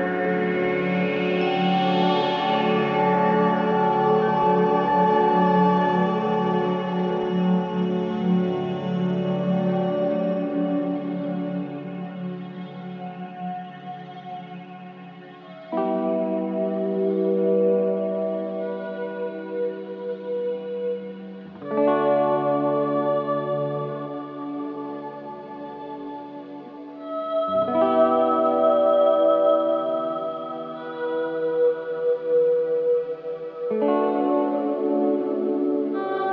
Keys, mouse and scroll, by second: 4.0 click, 7.2 click, 9.2 click, 12.3 Left, 12.3 click, 14.8 l, 15.3 l, 16.4 Left, 16.4 click, 18.1 Left, 18.1 click, 19.0 l, 19.6 Left, 19.6 click, 21.7 click, 23.9 click, 25.0-25.5 middle drag, 25.5-25.8 scroll down 2, 25.8-27.3 middle drag, 28.9 click, 29.9 click, 30.6 drag, 31.4 shift+click, 32.4 ctrl+b.